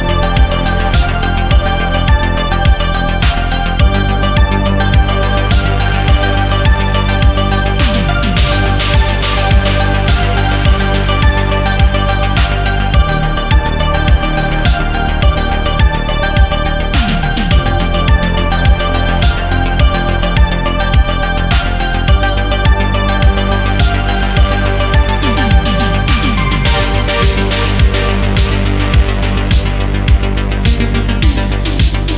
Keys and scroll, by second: 0.7 space, 1.1 ctrl+z, 1.4 ctrl+z, 3.3 space, 4.3 ctrl+z, 6.4 ctrl+z, 7.1 ctrl+z, 10.3 space, 11.6 ctrl+z, 13.4 ctrl+z, 14.1 ctrl+z, 14.4 space, 15.6 ctrl+z, 18.4 ctrl+z, 19.1 space, 21.1 ctrl+z, 22.0 ctrl+z, 22.3 ctrl+z, 24.5 space, 26.9 space, 29.5 space, 31.3 ctrl+z.